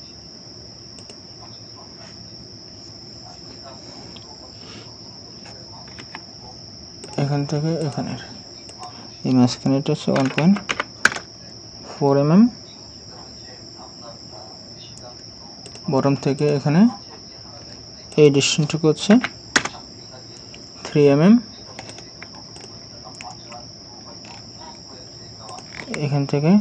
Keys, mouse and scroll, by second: 6.0 Escape, 10.2-10.7 typing, 11.1 Return, 14.0-14.3 scroll down 1, 19.2 typing, 19.6 Return, 21.9 right click, 24.3 scroll down 1, 25.8-26.4 scroll down 1.